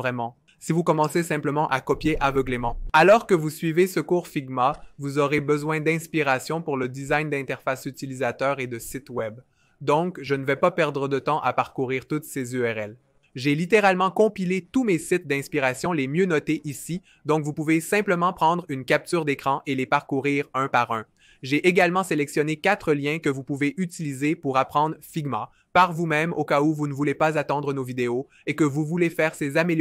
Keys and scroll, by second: 2.6 2, 20.8 2, 22.4-23.1 typing.